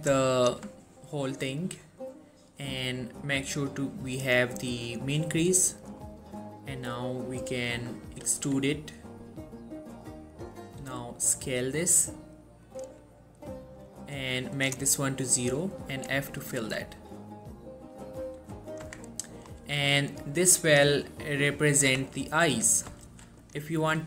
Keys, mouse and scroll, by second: 0.1 click, 0.5 alt+shift+click, 3.3-4.6 drag, 5.4 scroll down 1, 5.6-6.2 middle click, 6.1-7.3 scroll up 1, 7.3 middle click, 8.5 e, 10.4 click, 10.9 s, 12.8-14.9 drag, 16.1 f, 16.7 F1, 17.5-18.1 middle click, 18.5 g, 18.8 click, 18.9 Tab, 19.2 scroll down 1, 19.4 middle click, 19.7 1, 21.3-22.0 scroll up 1, 22.0 Tab, 23.2 ctrl+r, 23.5 click.